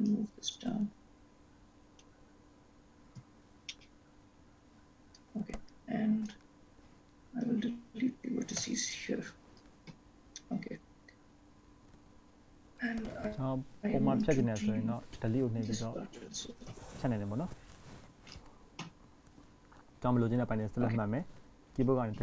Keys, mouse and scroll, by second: 0.2 click, 2.8 scroll up 1, 4.1 shift+middle click, 5.8 click, 8.8 x, 10.6-11.6 scroll up 3, 13.3-14.1 scroll up 1, 14.1-14.4 scroll up 1, 14.4 click, 16.9 x, 20.8 click.